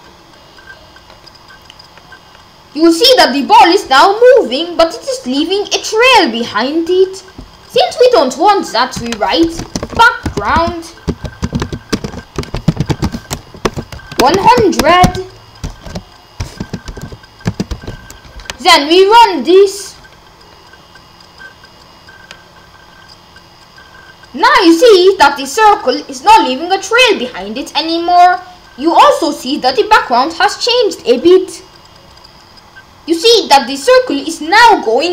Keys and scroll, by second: 9.6-14.8 typing, 15.8-17.7 typing.